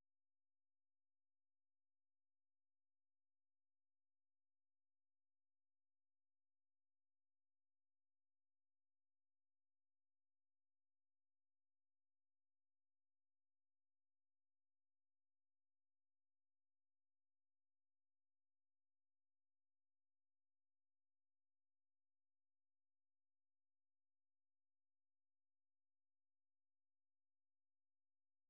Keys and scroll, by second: 0.2 ctrl+v, 1.0 Return, 10.1 super+2, 11.5 ctrl+w, 13.4 ctrl+t, 14.7 super+1, 19.7 Up, 19.9 Up, 20.1 Up, 20.3 Up, 21.2 Return, 23.3 ctrl+x, 23.7-28.4 typing.